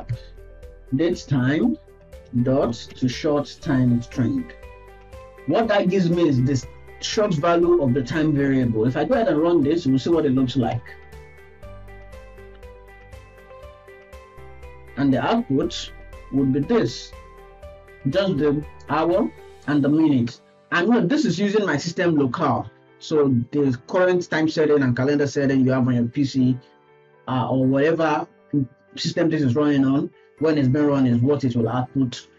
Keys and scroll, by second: 5.1 ctrl+s.